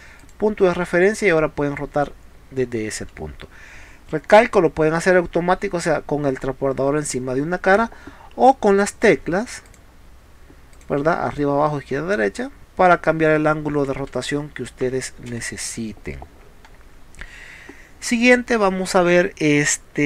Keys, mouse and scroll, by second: 0.2 click, 3.0 Escape, 8.4 Down, 9.1 Left, 9.7 click, 10.8 click, 14.9 Escape, 15.4 space, 15.6 click.